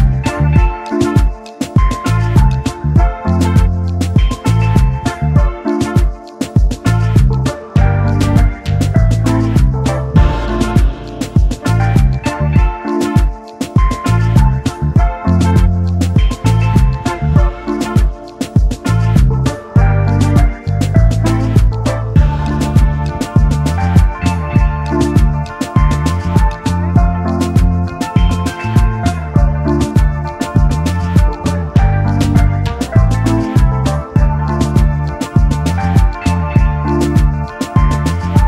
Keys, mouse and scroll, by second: 0.4 typing, 1.9 typing, 7.5 double click, 8.0-8.7 alt+scroll down 1, 10.7-11.1 alt+scroll up 1, 11.3 space, 11.3 double click, 15.2 space, 16.2 typing, 17.5 typing, 18.2-18.5 alt+scroll up 1, 19.2 alt+scroll up 1, 19.6 space, 24.6-25.0 alt+scroll down 1, 25.3 scroll up 1, 26.1-26.8 typing, 27.3-27.8 alt+scroll up 1, 28.1 alt+scroll up 2, 34.8-35.7 typing.